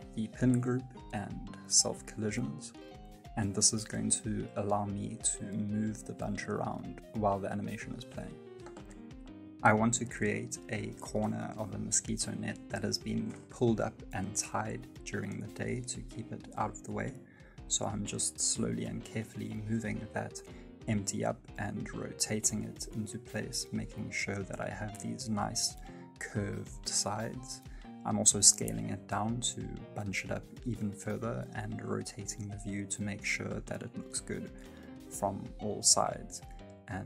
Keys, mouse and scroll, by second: 0.3-0.9 scroll down 3, 0.9 click, 1.5 middle click, 2.0 shift+middle click, 2.4 middle click, 4.5 space, 5.7 alt+z, 6.1 right click, 6.4 middle click, 7.0 r, 11.2 g, 18.7 space, 18.9 middle click, 19.1 shift+middle click, 19.2 space, 19.8 r, 24.4 g, 25.6 r, 27.6 middle click, 30.1-33.7 typing, 30.3 shift+middle click, 30.4 middle click, 32.7 middle click, 35.7 s.